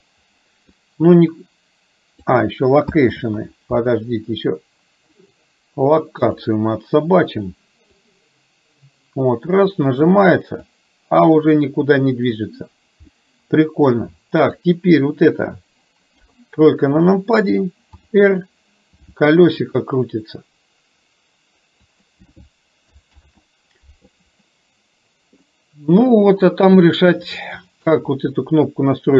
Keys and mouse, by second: 0.7-2.2 drag, 3.2 ctrl+z, 5.2 click, 6.3 click, 8.1-10.2 drag, 10.7-12.3 drag, 13.1 middle click, 14.6 click, 16.2 KP_3, 18.1 r, 23.2 ctrl+z, 25.5-28.0 middle drag.